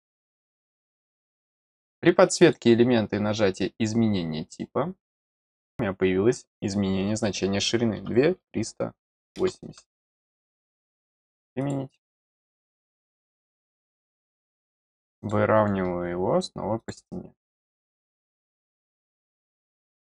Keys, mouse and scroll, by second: 0.8 click, 2.4 click, 5.5 click, 10.7 click, 11.5 click, 13.6 middle click, 15.1 click, 15.5-16.2 scroll up 3, 16.7 click, 17.5 click, 18.2 scroll down 1, 18.8 middle click, 19.4 middle click, 19.7-20.1 scroll down 1.